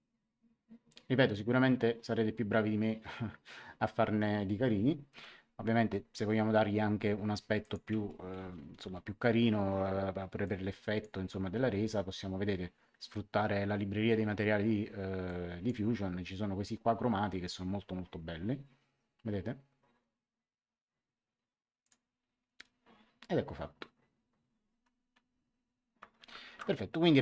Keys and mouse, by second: 5.1 a, 7.6 click, 8.2-8.8 typing, 10.4 click, 15.2 click, 21.8 click, 25.9 ctrl+1.